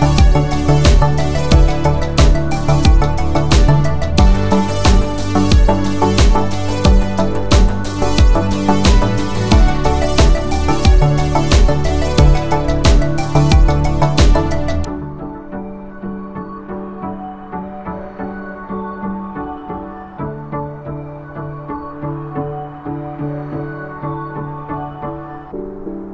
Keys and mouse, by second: 0.8-2.0 shift+middle drag, 2.4-2.9 middle drag, 4.0-4.3 shift+middle drag, 4.8 click, 5.3-5.7 middle drag, 6.0 ctrl+middle click, 7.9 shift+middle click, 11.2 shift+middle click, 13.6 click, 14.3 shift+click, 15.6 ctrl+j, 16.2 click, 16.8 Tab, 17.3 2, 18.2 alt+click, 19.1 middle click, 20.5 g, 22.4 click, 22.8-23.9 middle drag.